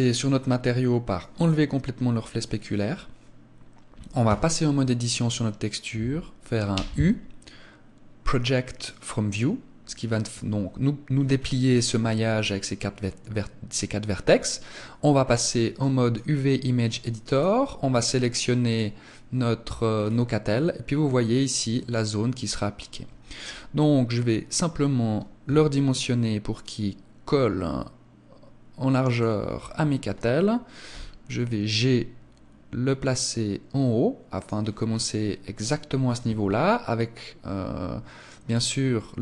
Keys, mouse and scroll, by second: 1.1 click, 4.1 Tab, 14.1 click.